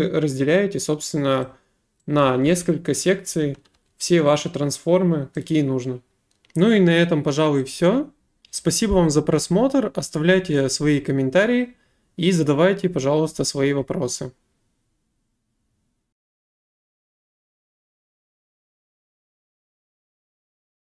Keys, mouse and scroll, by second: 1.4 click, 2.2-3.8 typing, 5.4 right click.